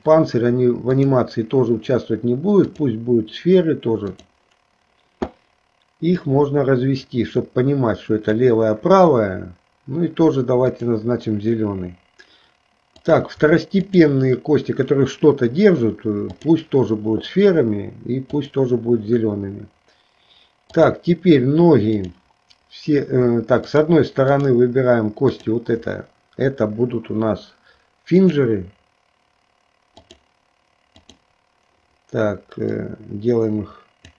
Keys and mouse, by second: 1.1-3.0 drag, 4.2 click, 6.2-8.5 drag, 10.8 click, 13.1 click, 14.0 shift+click, 16.4 click, 18.4 click, 20.7 click, 24.5 shift+click, 25.4 shift+click, 28.3-30.3 drag, 31.3 click, 32.7-34.1 drag.